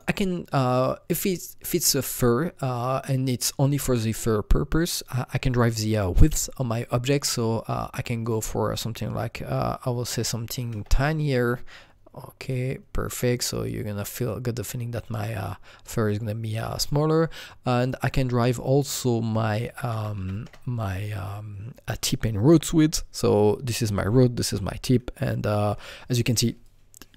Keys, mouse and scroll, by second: 8.2 click, 10.1-11.4 typing, 12.4 click, 16.8 click, 16.8 KP_1, 17.8 click, 18.0 double click, 19.2-20.5 typing, 20.5 KP_Enter, 26.5 KP_Enter, 26.5 KP_1, 26.6-27.1 alt+drag.